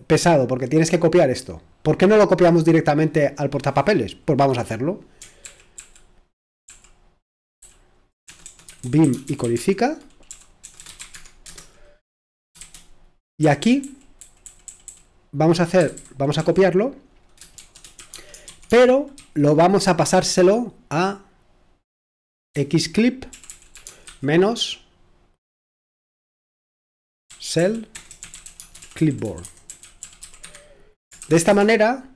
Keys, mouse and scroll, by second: 0.2-1.7 drag, 1.7-2.2 scroll down 1, 2.6-5.4 drag, 5.4 ctrl+p, 6.7 ctrl+p, 7.6 ctrl+p, 8.3-11.5 typing, 13.4 BackSpace, 15.7-16.4 typing, 17.6 typing, 18.1 Tab, 18.7 Return, 22.5-24.5 typing, 27.3-31.8 typing.